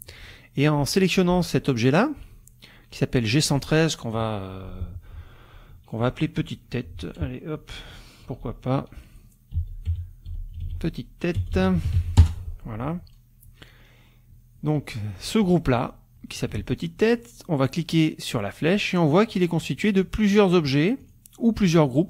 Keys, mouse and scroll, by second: 0.6 click, 3.4 click, 8.3-12.5 typing, 15.3-16.6 drag, 16.6 ctrl+z, 18.3 click, 19.1 click, 19.7 click, 20.5 click, 21.0 click, 21.9 click.